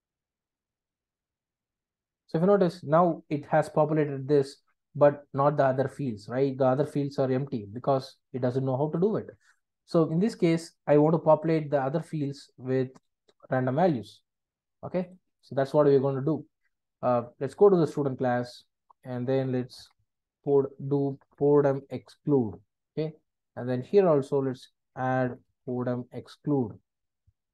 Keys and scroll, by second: 17.9 super+b, 22.4 Return, 27.2 Return.